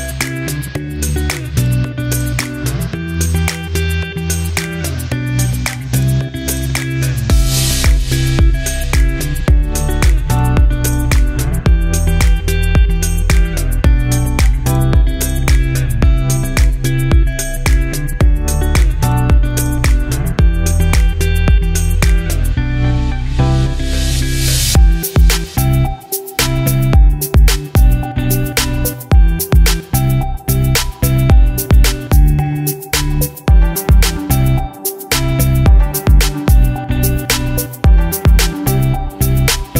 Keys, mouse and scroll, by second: 2.8-14.5 ctrl+drag, 23.9-36.5 drag, 36.4 right click, 36.5 right click, 38.7-39.7 shift+drag.